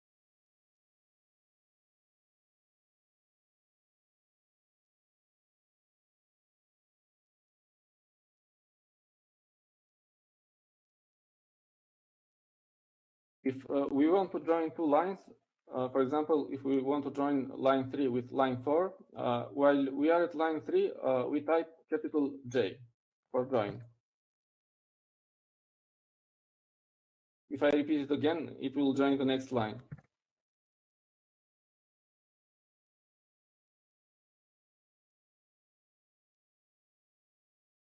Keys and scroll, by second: 17.3 Down, 22.6 Down, 23.3 Up, 26.6 typing, 32.6 typing, 34.6-34.9 typing.